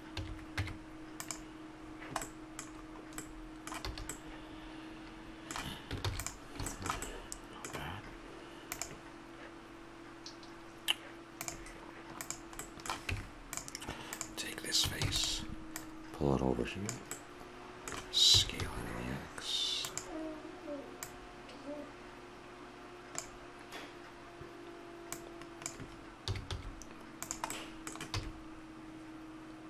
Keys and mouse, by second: 0.1 a, 0.6 Tab, 1.8-3.9 middle drag, 3.9 a, 6.0 ctrl+s, 12.2 right click, 13.1 Tab, 15.0 shift+d, 18.3 s, 21.0-22.8 drag, 25.1-27.0 drag, 26.2 s, 28.1 e.